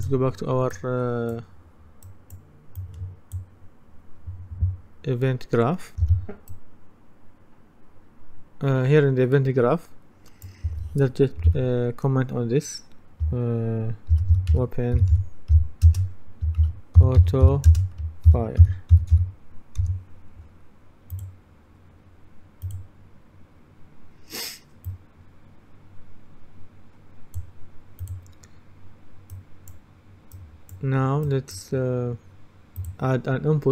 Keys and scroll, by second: 6.1 F10, 13.9-19.7 typing.